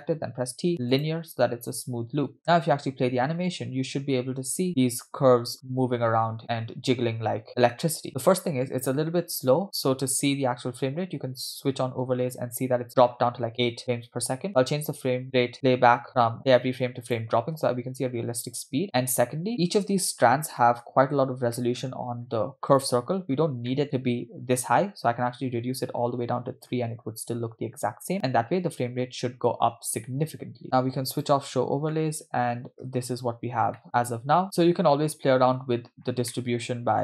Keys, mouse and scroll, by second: 0.2 t, 1.8-2.3 scroll down 2, 2.8 space, 2.9-3.3 scroll down 2, 4.0 scroll up 2, 4.7-5.1 scroll down 1, 8.1 space, 8.7 space, 11.5 click, 12.9 space, 14.0 space, 14.5-17.4 drag, 17.7 space, 19.0 space, 19.5 middle click, 19.5-20.2 scroll down 5, 20.6 middle click, 21.1-21.6 scroll up 3, 21.6 middle click, 22.1-22.8 scroll up 3, 22.8 click, 23.5 scroll up 1, 23.7 middle click, 24.6-26.6 drag, 28.1 space, 30.5 space, 31.1 click, 32.0-32.7 middle drag, 33.1 space, 33.2-33.8 scroll up 3, 33.8 middle click, 34.3-34.9 scroll down 2, 34.9 space, 35.2-35.7 scroll down 3, 36.0 scroll down 4, 36.3 middle click.